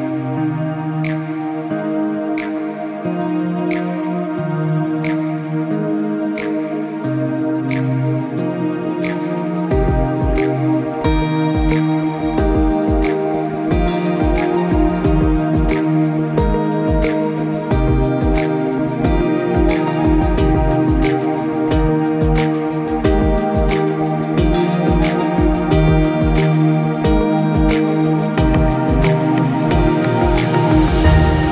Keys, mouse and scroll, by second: 0.6 alt+scroll down 1, 1.5 space, 1.7 click, 1.9 space, 3.2 click, 12.7 click, 20.4 space, 20.5 click, 20.9 space, 21.7 click, 25.6 space, 25.7 click, 26.0 space, 27.2 click.